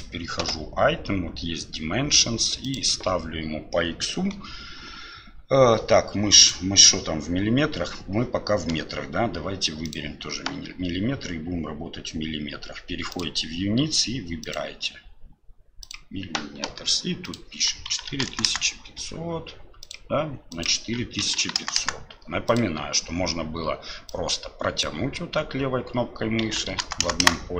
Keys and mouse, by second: 2.7-6.5 drag, 13.1 click, 14.4-15.9 drag, 17.3-19.9 drag, 18.5 KP_0, 21.8 KP_0, 24.9-27.5 drag, 27.0 KP_0.